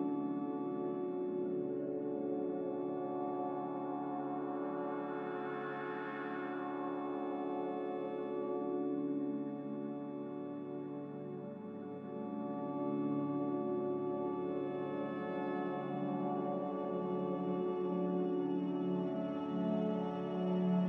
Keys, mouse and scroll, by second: 0.9 n, 3.0 n, 17.9 a.